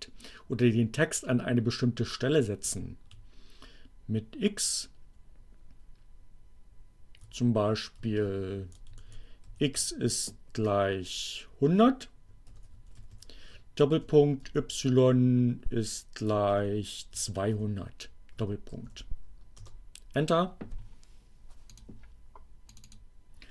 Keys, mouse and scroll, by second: 1.4 Up, 3.2 Left, 7.6 BackSpace, 9.4 Right, 9.6 x, 12.0-14.5 typing, 16.4-18.0 typing, 19.6 Return, 21.7 click, 22.8 click.